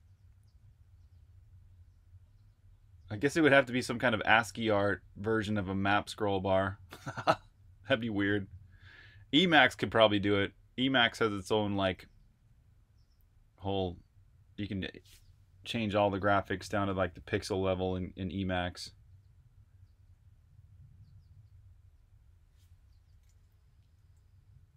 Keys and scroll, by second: 23.9 j.